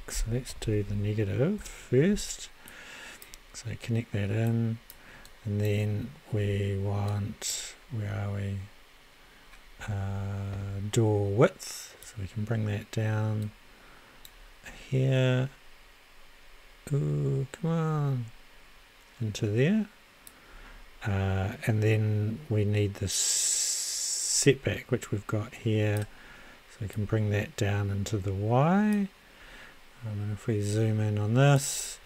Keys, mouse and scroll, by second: 0.6 e, 0.9 g, 1.6 Return, 13.2 click, 14.5 click, 15.6-16.2 scroll down 4, 16.6 click, 17.4 click, 20.3-21.9 drag, 22.6 click, 27.6-29.6 drag, 31.0-32.0 drag.